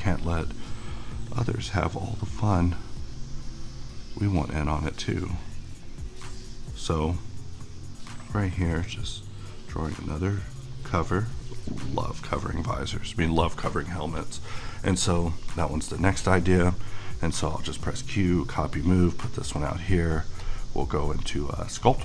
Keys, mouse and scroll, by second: 15.2-17.6 middle drag, 17.6 q, 18.2 click, 18.7-20.4 middle drag, 20.4 click.